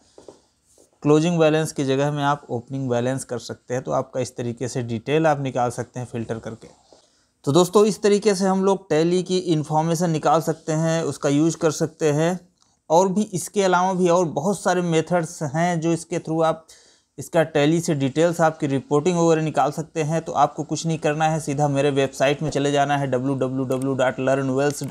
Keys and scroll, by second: 0.8 Up.